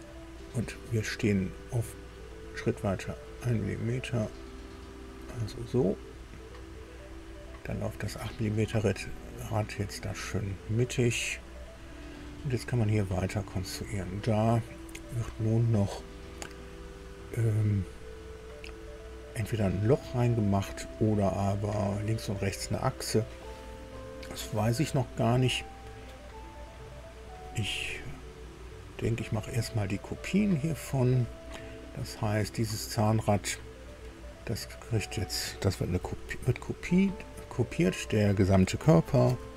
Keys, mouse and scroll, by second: 1.8-5.3 drag, 5.5-9.9 drag, 9.9-10.3 scroll down 2, 11.5 click, 13.2 click, 30.8 click, 39.2 ctrl+c.